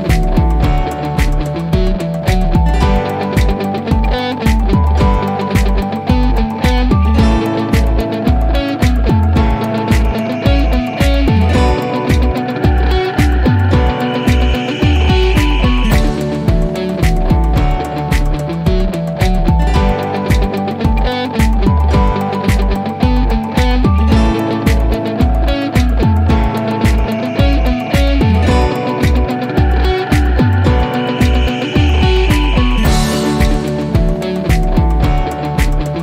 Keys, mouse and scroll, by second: 1.8-3.8 drag, 6.1-8.6 drag, 14.9 c, 17.2-17.7 drag, 19.0 typing, 19.8 Return, 22.4 click, 26.1 click, 30.9 typing, 32.3 typing, 33.3 click.